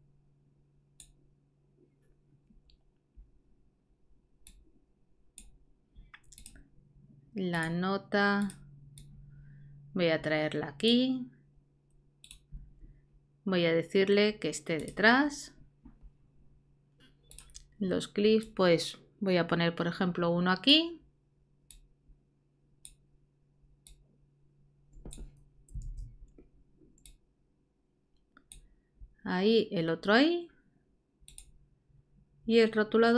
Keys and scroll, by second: 25.8 super+z.